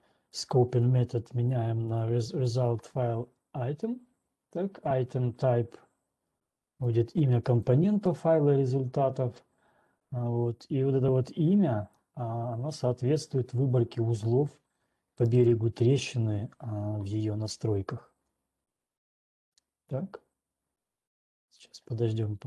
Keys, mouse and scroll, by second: 1.3 click, 2.3 click, 7.8 click, 12.3 click, 15.4 click.